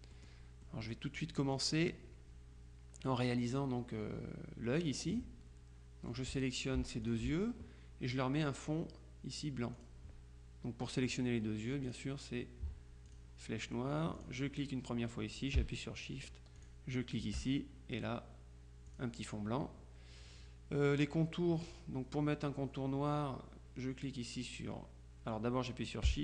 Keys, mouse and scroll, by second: 0.2 click, 6.2 click, 7.1 shift+click, 9.9 click, 11.9 click, 13.2 click, 14.3 click, 16.7 shift+click, 19.0 click.